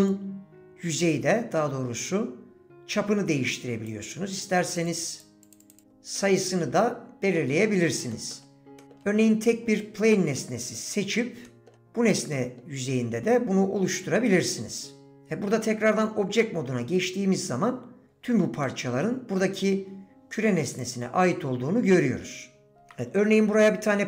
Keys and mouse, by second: 0.2-3.9 drag, 4.7 click, 4.9 click, 5.5 click, 5.6 click, 6.2 middle click, 6.3 click, 6.7 middle click, 7.3 click, 8.1 middle click, 8.8 middle click, 10.1 middle click, 11.5 middle click, 12.3 middle click, 13.3-15.2 middle drag, 16.0 Tab, 16.0-16.7 middle drag, 18.6 middle click, 18.7 click, 18.9-19.3 middle drag, 20.8 click, 21.9 click, 22.7 shift+Delete, 22.9 shift+a.